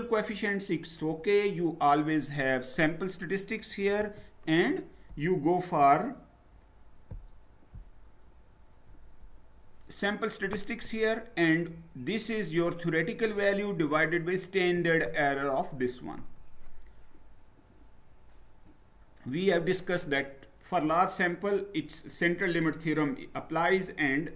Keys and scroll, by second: 2.3 Down, 4.1 Up.